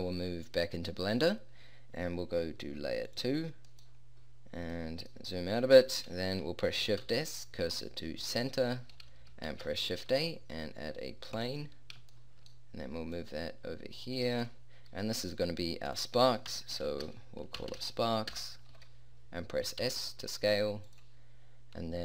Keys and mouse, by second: 3.1 middle click, 7.0 shift+s, 9.5 shift+a, 13.2-14.4 middle drag, 19.8 s.